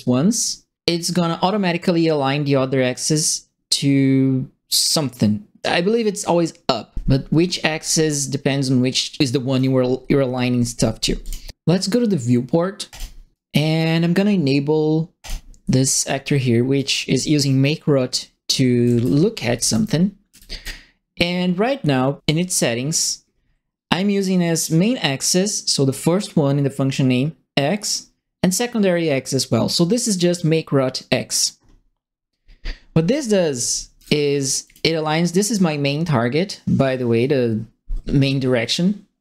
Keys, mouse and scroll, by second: 9.2 click, 11.2 click, 12.9 click, 13.3 right click, 15.2 click, 16.7-20.6 right drag, 17.1 s, 18.5-20.1 typing, 33.2-34.2 typing, 33.4 right click, 34.6 click.